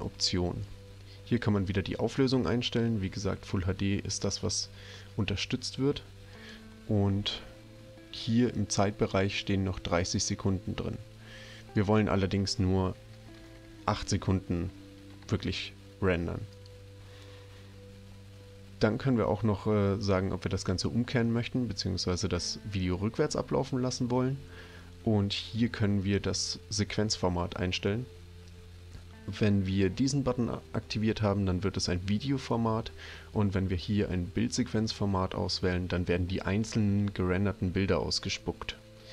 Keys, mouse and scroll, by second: 0.6-1.7 drag, 6.3 click, 11.7 click, 13.2 BackSpace, 13.4 BackSpace, 13.6 8, 16.5 click.